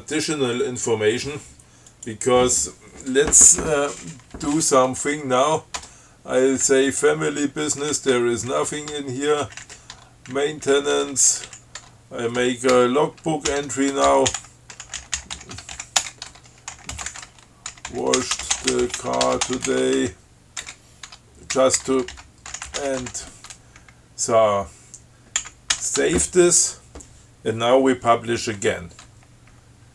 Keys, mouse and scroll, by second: 2.1 click, 4.0 Up, 6.0 Tab, 7.9 Up, 8.4 Tab, 8.7 Up, 9.2 Tab, 9.7 Down, 10.2 Tab, 10.6 Down, 12.1 Tab, 12.6 BackSpace, 13.7-20.7 typing, 16.5 shift+Tab, 21.3 Tab, 21.8-23.7 typing, 25.6 ctrl+x, 26.0 ctrl+s.